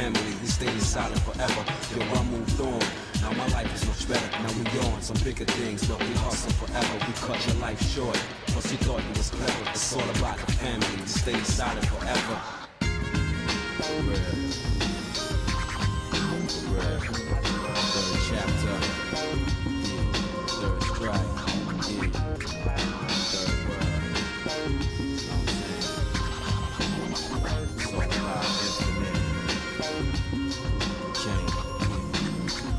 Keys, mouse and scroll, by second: 0.3 shift+middle click, 0.9 middle click, 1.9 click, 2.7 click, 3.2 shift+click, 4.4 j, 5.2 click, 5.8 shift+click, 7.0 j, 7.6 middle click, 8.1 shift+middle click, 9.4 KP_Divide, 10.3 shift+middle click, 10.8 Tab, 11.3 middle click, 11.9 shift+middle click, 12.5 middle click, 14.1 ctrl+s, 14.6 middle click, 15.2 middle click, 15.7 click, 16.1 Tab, 16.6 shift+middle click, 17.8-19.3 shift+middle drag, 20.2 ctrl+Tab, 22.5 click, 22.9 shift+middle click, 23.8 shift+click, 24.2 shift+middle click, 25.5 click, 26.0 middle click, 26.6 shift+middle click, 28.0 shift+middle click, 30.0 i.